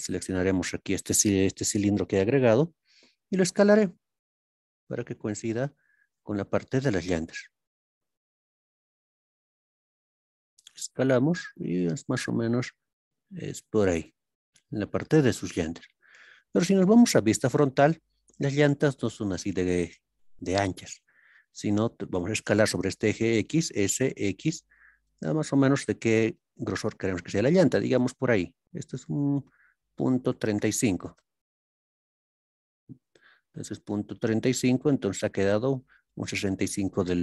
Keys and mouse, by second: 5.5 click, 6.4-7.2 shift+drag, 9.4 click, 11.5 click, 13.9 click, 17.1 KP_1, 30.3 KP_3, 30.5 KP_5, 31.2 KP_Enter.